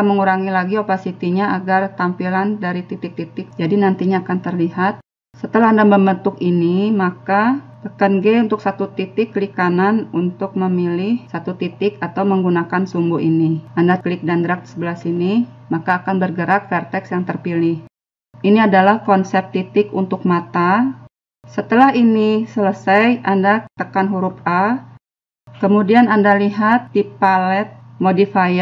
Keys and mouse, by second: 2.9 click, 5.4-6.4 middle drag, 5.4 n, 6.6 right click, 7.7 g, 8.9 right click, 9.2 g, 10.8 g, 11.5 click, 12.7-13.8 drag, 14.9-16.0 drag, 16.4 click, 24.0 a, 27.2 click.